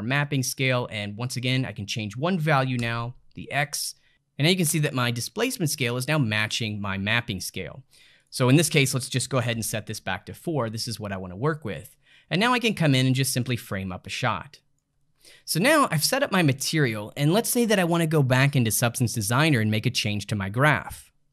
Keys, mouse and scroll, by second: 0.5-3.7 drag, 8.2-11.3 drag, 12.9-15.0 ctrl+middle drag.